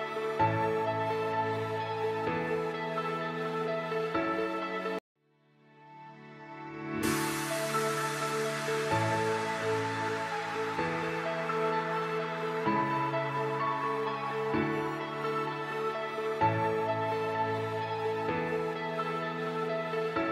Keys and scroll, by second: 1.2 c, 1.7 shift+F2, 2.1 Escape, 6.3 space, 6.8 alt+c, 13.6 alt+c, 16.4 F3, 16.8 Escape, 18.0 shift+F2.